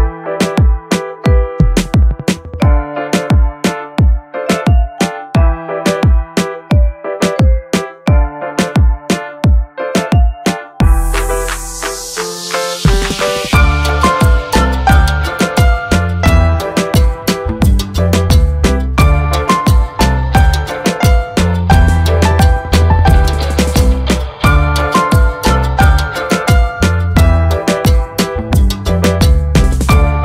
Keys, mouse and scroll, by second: 12.8 click, 14.1 click, 17.7 space, 18.1 ctrl+click, 19.2 ctrl+space, 19.4 ctrl+click, 20.7 ctrl+space, 21.0 ctrl+click, 25.8 ctrl+click, 28.3-30.1 drag.